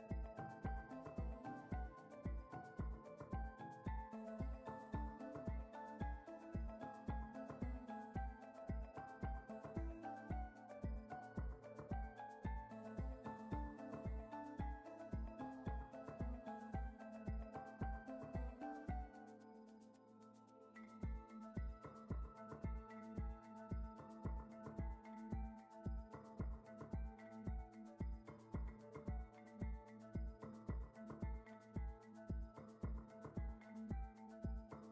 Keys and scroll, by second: 8.8 Tab, 15.1 ctrl+r, 19.2 Tab, 24.8 Tab, 25.8 a, 27.1 s, 32.8 ctrl+Tab.